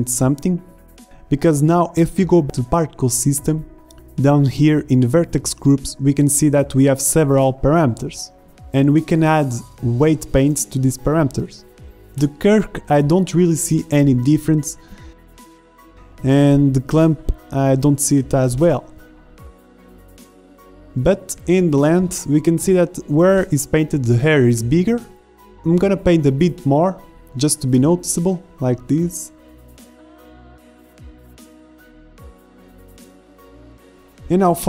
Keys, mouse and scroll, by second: 6.8 ctrl+Tab, 12.9-13.3 middle drag, 17.1-18.6 middle drag, 22.1-22.5 middle drag, 22.7 middle drag, 23.0 shift+z, 24.0 z, 24.7-25.1 drag, 25.3 z, 25.5 ctrl+Tab, 26.6 drag, 26.9-27.6 drag, 29.0 ctrl+Tab, 31.0-31.6 middle drag, 31.6 shift+z, 34.4 z.